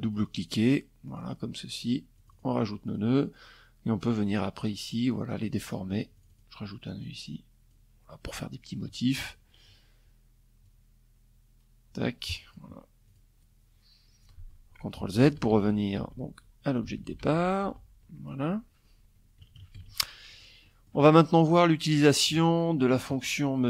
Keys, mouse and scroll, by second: 0.7 click, 1.4 click, 2.6 click, 4.0 click, 4.7 click, 5.5 click, 9.2-11.3 drag, 11.6 click, 12.8 click, 13.5 ctrl+z, 15.4 ctrl+z, 17.9 KP_Subtract, 18.3 F1, 18.8 click, 20.1 click, 20.7 click.